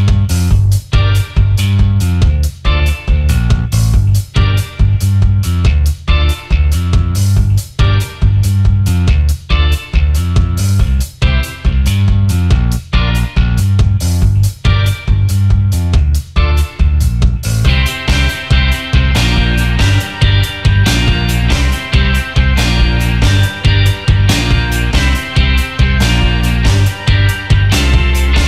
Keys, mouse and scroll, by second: 0.2 double click, 0.9 alt+scroll down 1, 1.5 alt+scroll up 1, 4.8 Up, 5.4 Up, 6.0 Down, 7.4-7.8 alt+scroll up 1, 10.5 double click, 12.4 ctrl+x, 14.0 double click, 15.9 alt+scroll down 1, 16.2 space, 17.4 double click, 17.9-18.2 alt+scroll up 1, 18.4 space, 20.6 alt+scroll up 1, 22.5 double click, 25.2 shift+click, 27.9 Delete.